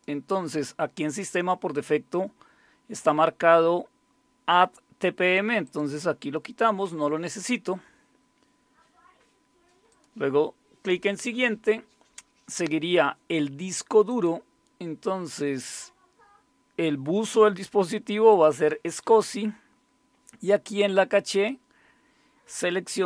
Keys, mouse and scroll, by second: 5.6 click, 5.9 click, 9.9 click, 14.1 click, 18.3 click, 20.8 click.